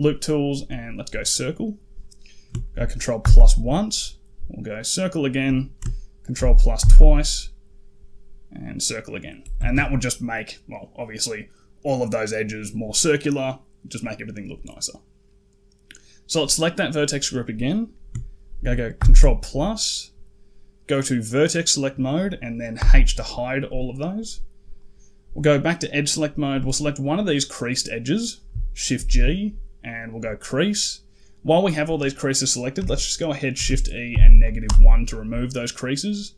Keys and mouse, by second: 1.0 click, 1.2 typing, 3.1 ctrl+KP_Add, 4.7 click, 4.8 typing, 6.2 ctrl+KP_Add, 6.6 ctrl+KP_Add, 8.5 click, 9.4 a, 9.6 a, 16.2 click, 18.8 ctrl+KP_Add, 21.1 click, 22.6 h, 24.6 click, 26.4 click, 28.8 shift+g, 33.4 shift+e.